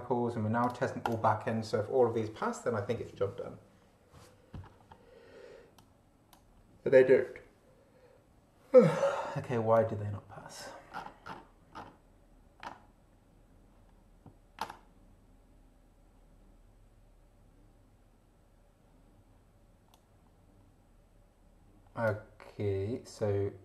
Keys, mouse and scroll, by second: 0.6 click, 1.0 click, 5.7 click, 9.8 click, 10.9-12.1 scroll down 4, 19.9-22.2 drag.